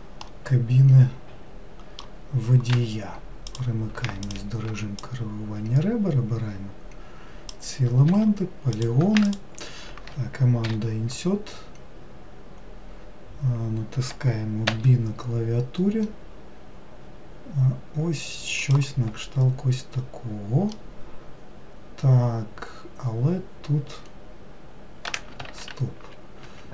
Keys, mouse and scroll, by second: 0.3-2.8 middle drag, 2.8 2, 3.5 click, 4.2 shift+click, 5.0 click, 8.8 click, 9.3 shift+click, 10.7 i, 20.7-23.8 middle drag, 25.5 ctrl+z, 26.5 Escape.